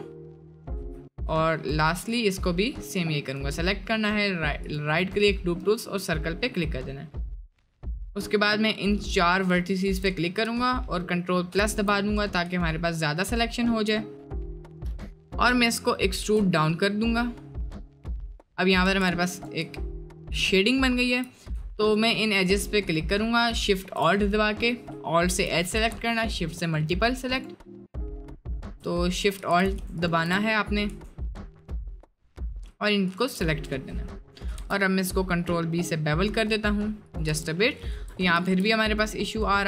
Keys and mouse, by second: 1.4 click, 2.0-3.0 drag, 3.4-4.8 drag, 7.9-9.2 shift+drag, 9.7 shift+click, 11.5 ctrl+KP_Add, 12.6 shift+middle click, 13.2 shift+middle click, 14.3 middle click, 15.3 middle click, 15.8 middle click, 16.2 e, 18.9 2, 20.3 alt+shift+click, 20.7 alt+shift+click, 22.0 alt+shift+click, 22.4-23.7 alt+shift+drag, 24.2 middle click, 25.1 shift+middle click, 26.6-27.9 alt+shift+drag, 28.4 alt+shift+click, 29.6 ctrl+z, 30.0 alt+shift+click, 31.8 alt+shift+click, 33.0 alt+shift+click, 33.5 middle click, 33.9 middle click, 34.5 ctrl+b, 37.3 Tab, 37.6 drag, 38.3 Tab, 38.5 ctrl+t, 39.3 click.